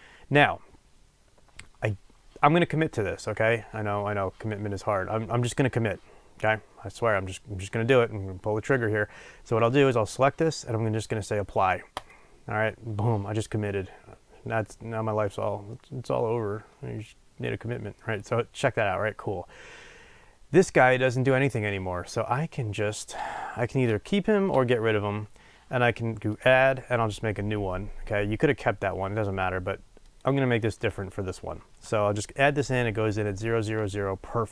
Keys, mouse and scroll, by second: 12.0-13.3 drag, 15.8-21.1 middle drag, 21.1 click, 24.5 Delete, 30.2-34.5 drag.